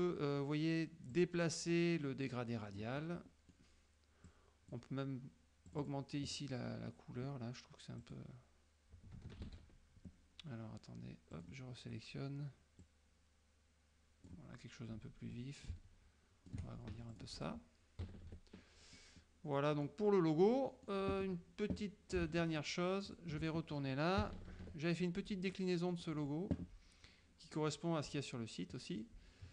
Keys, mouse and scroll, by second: 1.2-3.0 drag, 3.1 click, 4.4 click, 5.8 click, 8.1 click, 9.5 ctrl+z, 11.4 click, 12.9-14.5 drag, 15.8 click, 17.0 ctrl+shift+F1, 17.2 ctrl+shift+click, 18.1 KP_Subtract, 19.2 click, 20.7 click, 22.4 alt+Tab, 23.2 alt+click, 24.3 KP_Subtract, 25.7 click, 25.9 middle click, 28.9-29.5 drag.